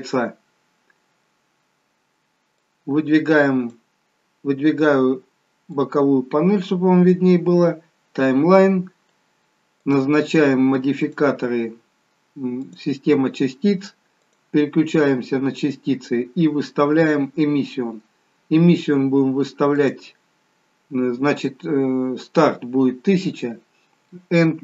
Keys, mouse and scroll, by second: 3.1 click, 9.9 click, 14.4 click, 19.9 click.